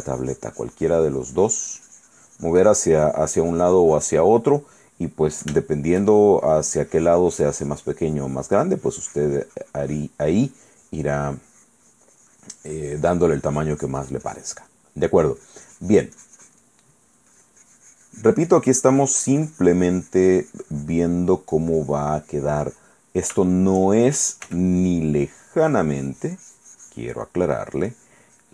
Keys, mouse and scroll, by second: 4.8 middle click, 5.8 shift+middle click, 6.7-15.3 shift+drag, 15.4-16.9 drag, 17.0 click, 17.5-23.6 drag, 24.6 f, 25.1 click, 25.4-28.0 drag, 28.1 click.